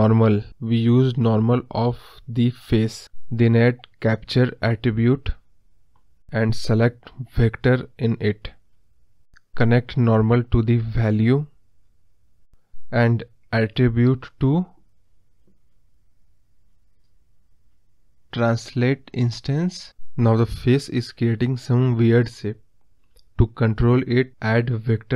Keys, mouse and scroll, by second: 9.6-19.4 drag, 19.9 scroll down 4.